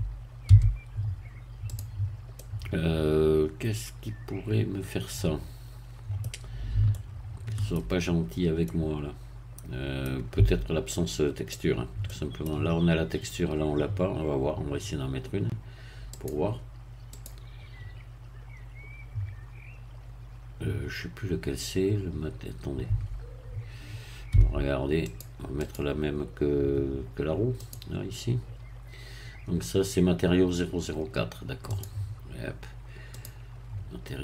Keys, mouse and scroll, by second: 0.5 q, 1.7 click, 2.3-6.7 middle drag, 6.9-8.1 shift+middle drag, 8.1-8.7 shift+scroll up 1, 8.7-10.2 middle drag, 10.4 Tab, 10.9 middle click, 11.6-12.1 scroll down 1, 12.1-13.9 middle drag, 16.1 click, 17.1 click, 22.9 Tab, 24.3 Tab, 25.1 click, 25.7 click, 27.6 click, 31.7 click, 33.1 click.